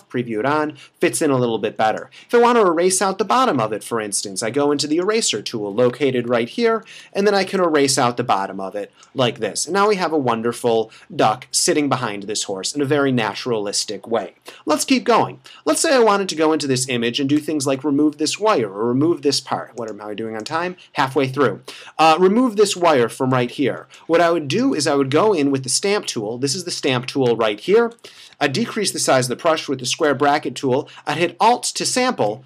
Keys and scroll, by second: 6.4 ], 6.8 [, 16.7 space, 22.8 super+=, 23.7 space, 28.1 [, 29.0 ].